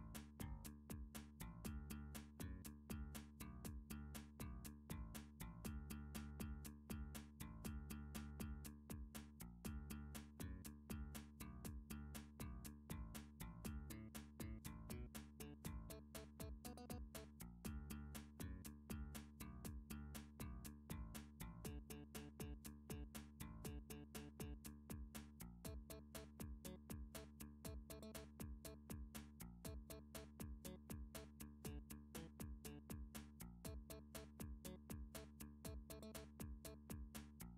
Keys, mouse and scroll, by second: 2.2-6.5 middle click, 2.3 Tab, 3.4 7, 4.1-5.6 scroll, 10.6 middle click, 11.6 Tab, 13.3 middle click, 13.9 click, 14.7 7, 17.3 g, 20.9 click, 21.6 click, 21.9 g, 24.3 click, 24.8 click, 25.1 g, 27.1 click, 27.7 click, 28.0 g, 30.4 click, 31.2 click, 31.6 g, 34.1 click, 34.7 click, 34.9 g, 36.4 click, 36.9 click, 37.3 g.